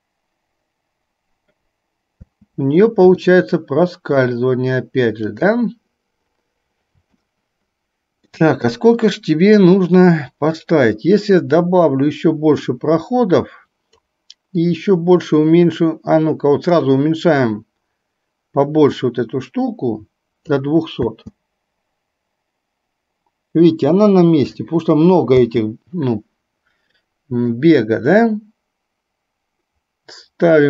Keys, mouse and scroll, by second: 2.4 space, 3.4-4.3 middle drag, 5.3 click, 11.4-14.2 drag, 14.8-20.7 drag, 21.0 space, 25.4 space, 27.5-30.6 drag.